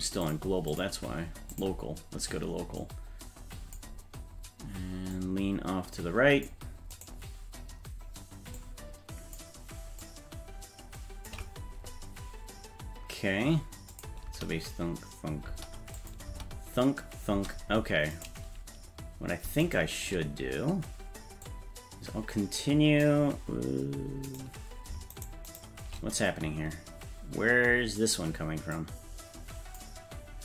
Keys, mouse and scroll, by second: 0.2 click, 0.7-1.7 drag, 2.8 click, 5.1-6.5 drag, 7.0 right click, 8.6 click, 10.0-11.3 drag, 13.9 click, 14.3 space, 15.5 space, 16.0 click, 16.3 space, 17.3 space, 18.2 right click, 19.7 shift+right click, 21.5-23.0 drag, 24.3 right click, 25.5 shift+right click, 28.8 click.